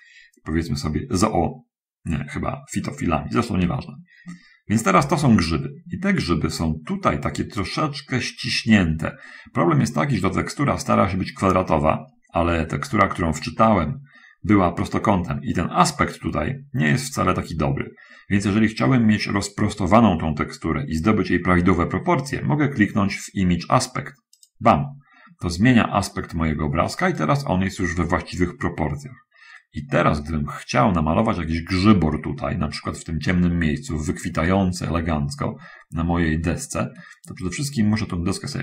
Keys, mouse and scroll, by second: 24.7 click, 27.5-34.1 right drag, 34.7 middle click, 37.3-38.6 middle drag.